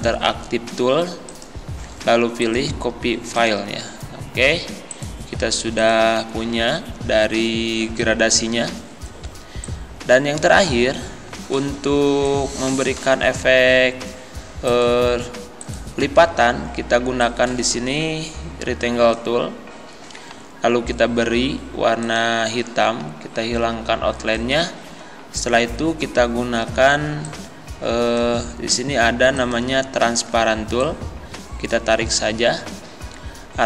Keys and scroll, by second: 9.3 z.